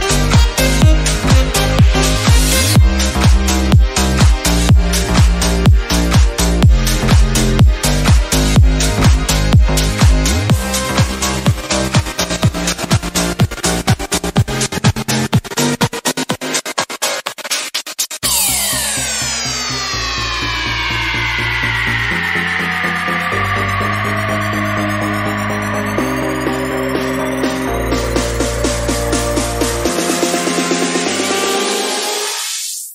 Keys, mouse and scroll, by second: 0.4 middle click, 1.4-3.7 shift+drag, 3.7 middle click, 4.3-5.5 shift+drag, 5.5-6.7 middle drag, 6.7-9.3 shift+drag, 9.3 middle click, 9.9 click, 10.6-11.7 shift+drag, 11.7 shift+middle click, 12.4 click, 12.6 middle click, 13.4 2, 13.6-13.9 scroll up 1, 13.9 click, 14.5 3, 14.8-16.0 drag, 16.0 middle click, 16.7 shift+click, 17.9 shift+middle click, 18.7-19.8 drag, 20.0 shift+click, 20.8-21.2 scroll down 1, 21.2 shift+middle click, 21.5-22.5 scroll up 3, 21.7 shift+middle click, 22.5-26.5 shift+drag, 26.5 Tab, 26.6-27.3 scroll down 3, 26.7 middle click, 27.3 shift+middle click, 27.8-28.2 scroll up 1, 28.2 click, 28.7 KP_Decimal, 29.3 scroll down 2, 29.5 middle click, 29.8 click, 30.7 shift+middle click, 31.0-32.3 drag, 32.3 scroll down 1, 32.6 click, 32.8 middle click.